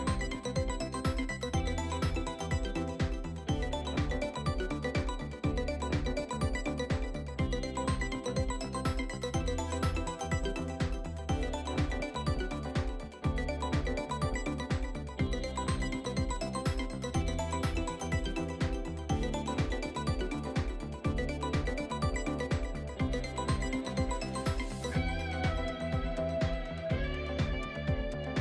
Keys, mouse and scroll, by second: 0.1-0.5 middle drag, 2.7-7.4 drag, 8.3-10.8 drag, 10.9 scroll down 2, 11.5-12.5 shift+middle drag, 12.5 scroll down 2, 12.9-14.9 shift+middle drag, 14.9 click, 22.0-22.4 scroll down 3, 22.9-24.7 shift+middle drag, 24.7-25.1 scroll up 5, 25.1-25.7 middle drag, 25.7 click.